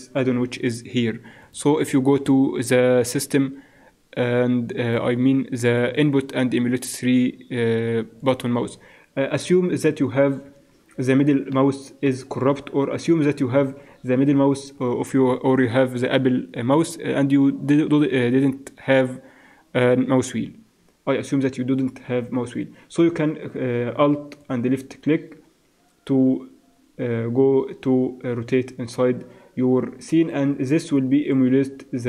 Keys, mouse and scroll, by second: 10.7 shift+c, 24.5-32.0 middle drag.